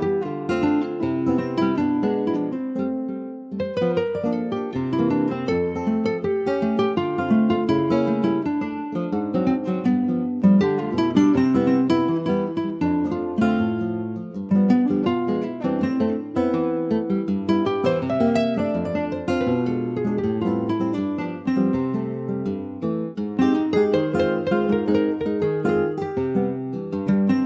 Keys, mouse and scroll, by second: 1.6 click, 2.0 click, 4.2 shift+click, 5.2 x, 7.6 middle click, 8.0 Tab, 8.2-9.6 middle drag, 9.6 Tab, 10.6 Tab, 11.7 alt+z, 12.5 ctrl+s, 14.1 /, 14.6 middle click, 15.0 click, 15.5 ctrl+s, 15.7-17.1 scroll up 2, 16.0 middle click, 17.1 alt+middle click, 17.5 alt+middle click, 17.7-18.3 alt+scroll up 1, 18.3 s, 20.9 Tab, 21.6-22.1 scroll up 1, 22.1 shift+middle click, 22.7 ctrl+s, 23.6 click, 23.9 Tab, 24.5 Tab, 25.2 a, 26.6 alt+s.